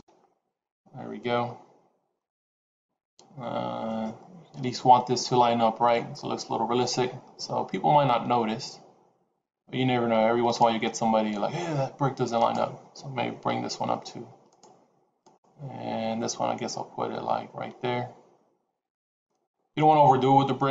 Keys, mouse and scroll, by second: 6.9 g, 12.3 click, 13.4 g, 15.1 click, 16.1 g.